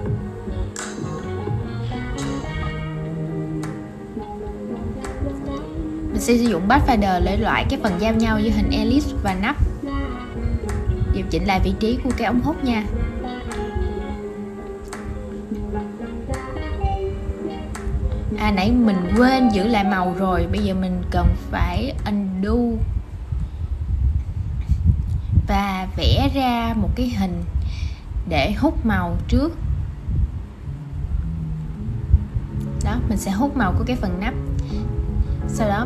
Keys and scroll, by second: 22.6 super+z, 22.9 super+z.